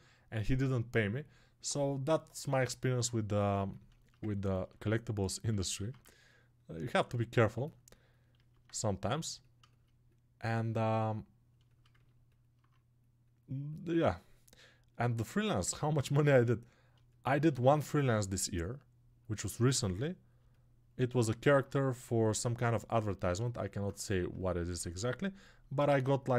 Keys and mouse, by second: 15.1 click, 15.9-16.9 drag, 17.2 click, 18.4 click, 19.6-26.3 drag.